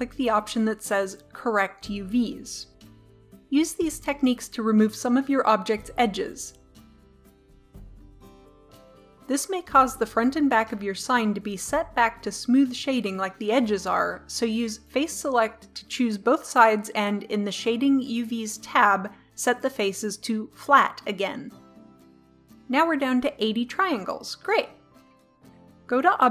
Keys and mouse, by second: 0.1-2.1 drag, 2.8 right click, 2.8 Delete, 3.3 click, 3.4 right click, 3.6 Delete, 3.7 click, 3.8 right click, 3.9-6.9 typing, 4.0 Delete, 4.0 right click, 4.4 Delete, 4.4 click, 4.5 click, 5.0 click, 5.2 Delete, 5.4 right click, 6.0 click, 6.2 click, 6.3 Delete, 6.7 click, 7.1 Delete, 7.1 click, 7.4 click, 8.0 g, 8.1 right click, 8.2 Delete, 8.3 click, 8.5-9.5 drag, 14.9 click, 15.5 right click, 15.7-22.4 drag, 22.4-25.8 middle drag, 25.8 Tab.